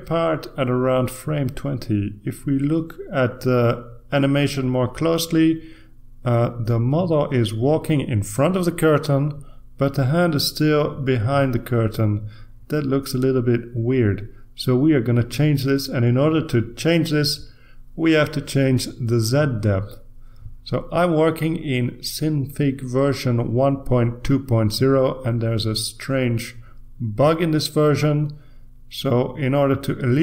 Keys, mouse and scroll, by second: 3.1 click, 10.6 click, 12.4-18.0 drag.